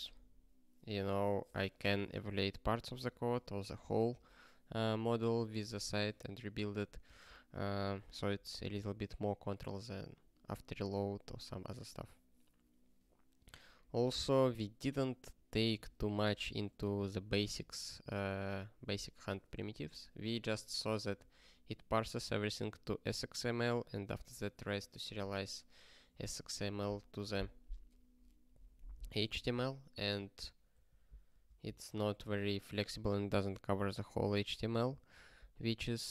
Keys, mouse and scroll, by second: 7.0 ctrl+g, 14.4 ctrl+space, 14.5 ctrl+n, 15.7 ctrl+g, 16.2 ctrl+space, 16.3 ctrl+p, 30.1 ctrl+space, 30.7 ctrl+g, 31.2 ctrl+space, 31.4 ctrl+p, 33.9 ctrl+n, 34.1 ctrl+space, 34.3 ctrl+n, 35.1 ctrl+g.